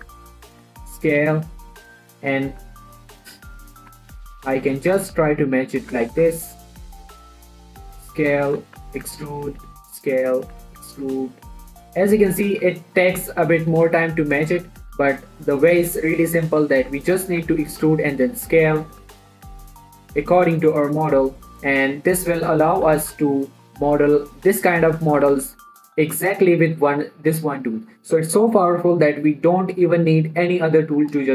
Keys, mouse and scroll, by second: 0.2 g, 0.4 z, 0.9 click, 1.0 s, 2.1 click, 2.3 shift+middle click, 2.8 ctrl+r, 3.3 right click, 3.7 shift+middle click, 4.3-6.6 typing, 5.2 click, 6.0 click, 7.4 click, 7.6 s, 8.7 click, 8.8 shift+middle click, 9.2-13.7 typing, 9.8 click, 10.8 click, 12.0 click, 13.4 click, 14.1 click, 14.4 shift+middle click, 14.8 scroll up 1, 15.0 shift+middle click, 15.3 e, 15.6 z, 15.8 click, 16.1 s, 17.6 click, 17.9 e, 18.0 z, 18.6 click, 19.2 e, 19.4 z, 19.6 click, 19.8 s, 20.6 click, 21.0 shift+middle click, 21.1 shift+e, 21.3 z, 21.8 click, 22.1 s, 22.8 click, 23.0 shift+middle click, 23.3 e, 23.5 z, 24.1 click, 24.4 s, 25.0 click, 25.3 shift+middle click, 25.6 e, 25.8 z, 26.2 click, 26.6 s, 27.6 click, 28.1 scroll down 1.